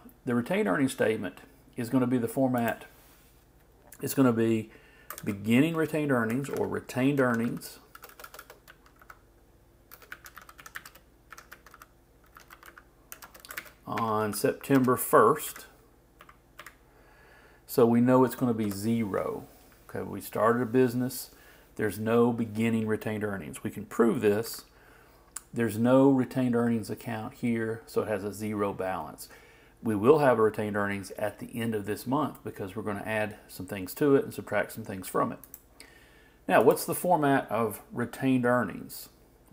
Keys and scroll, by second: 5.2-7.0 typing, 13.5 shift+space, 14.0 shift+e, 24.4 alt+Left.